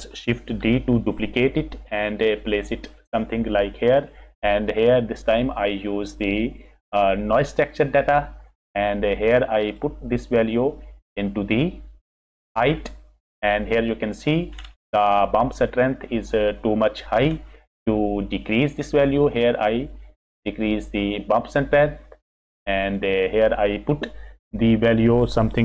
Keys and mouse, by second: 0.6 shift+d, 2.5 click, 3.7 click, 5.1 click, 10.0-12.8 drag, 18.3 click, 19.7-22.5 drag, 22.9-25.6 drag.